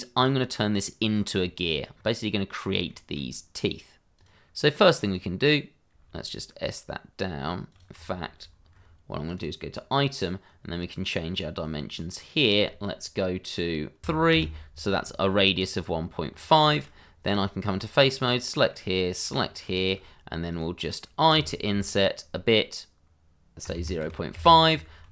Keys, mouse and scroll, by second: 0.1 click, 1.0-1.3 scroll down 1, 1.4 shift+middle click, 1.9 scroll up 1, 2.9 shift+middle click, 4.1 click, 5.9 s, 7.7 click, 8.2 ctrl+z, 9.2 click, 11.6 click, 14.0 3, 14.3 Return, 15.8 scroll down 1, 16.3 scroll up 1, 16.6 shift+middle click, 17.0 scroll up 1, 17.3 Tab, 17.9 click, 18.2 middle click, 19.8 shift+click, 19.8 click, 21.7 i, 23.6 KP_0, 24.3 KP_Enter.